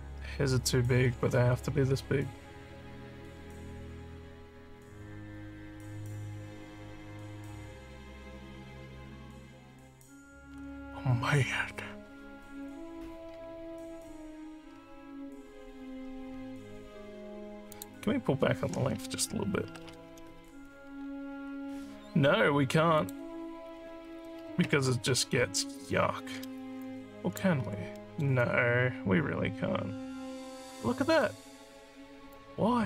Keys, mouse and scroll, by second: 17.7 click, 23.0 click, 26.8 alt+click, 27.6 alt+scroll down 2, 27.9 alt+middle click, 28.3-31.1 alt+drag, 32.3 alt+click.